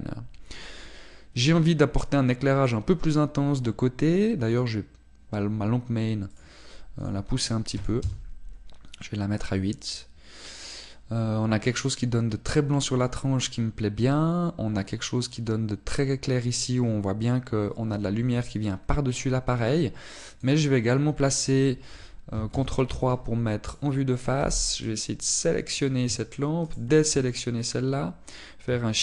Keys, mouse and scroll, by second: 5.6 click, 9.1 click, 20.7 click, 22.1-23.6 scroll down 1, 23.6 ctrl+KP_3, 24.7 right click, 25.5 b, 27.7 shift+right click.